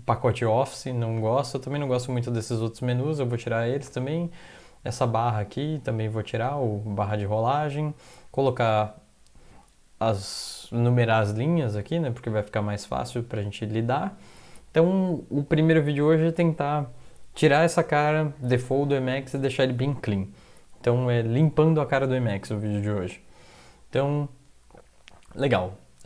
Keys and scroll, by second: 25.4 alt+F4.